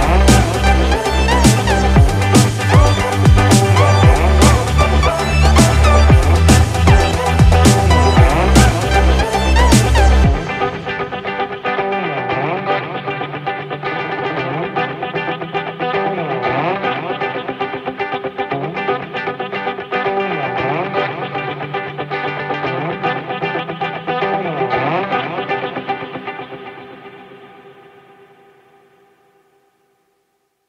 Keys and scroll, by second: 10.9 ctrl+-, 20.0 ctrl+z, 25.3 ctrl+z.